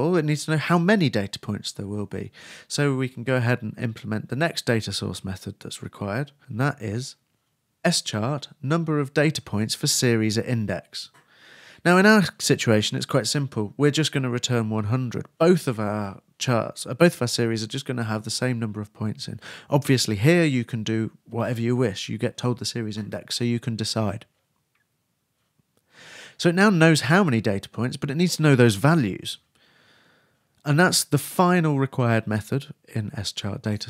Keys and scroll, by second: 12.3 shift+Return, 12.7 shift+[, 12.8 shift+Return.